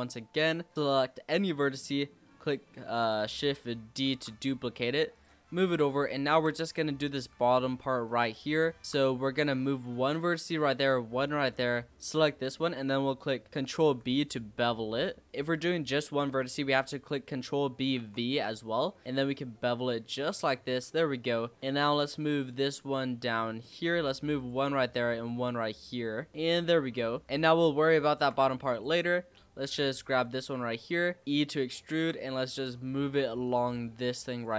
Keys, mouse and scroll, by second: 0.1 scroll down 2, 0.5 shift+middle click, 0.7-4.0 shift+scroll up 2, 4.0 shift+d, 5.4-5.7 scroll up 4, 5.7-7.1 shift+middle drag, 7.1 g, 8.8 shift+middle click, 9.1 e, 10.5 e, 11.9 click, 13.7 ctrl+b, 20.8 click, 21.2 scroll down 3, 21.6 shift+middle click, 21.6-22.1 scroll up 3, 22.1 e, 24.6 e, 27.2 scroll down 1, 27.2-28.7 shift+middle drag, 28.7 click, 29.0-30.0 scroll up 6, 30.0 g, 31.2 e, 31.2-31.6 scroll down 5, 31.6-32.7 shift+middle drag, 32.7 click.